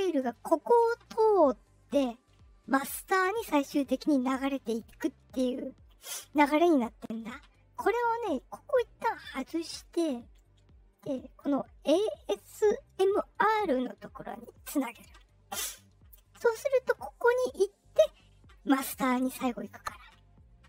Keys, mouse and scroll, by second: 4.6 click, 6.0 click, 9.0 click, 14.3 click, 17.2 click.